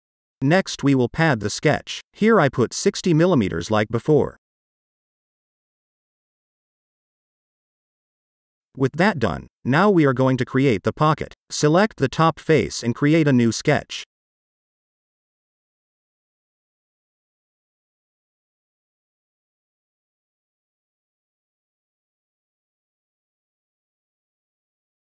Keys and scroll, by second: 1.2-2.2 typing.